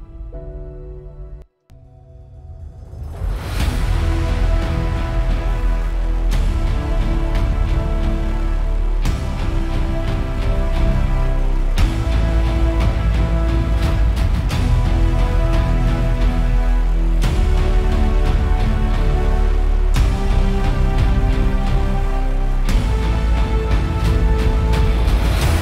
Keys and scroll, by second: 1.6 space, 1.9 space.